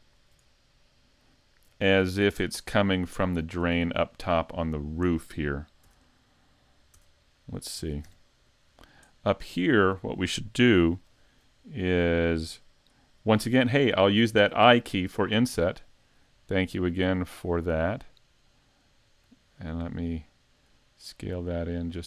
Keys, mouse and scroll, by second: 0.0 alt+right click, 1.2 click, 2.5-3.2 scroll down 5, 3.4 scroll down 4, 3.7 middle click, 5.1 middle click, 5.9 Tab, 6.0 right click, 6.9 Tab, 7.4 middle click, 7.8 ctrl+Tab, 8.4 right click, 8.7 scroll down 3, 9.1 middle click, 10.9 KP_5, 11.7 scroll up 1, 12.1 shift+middle click.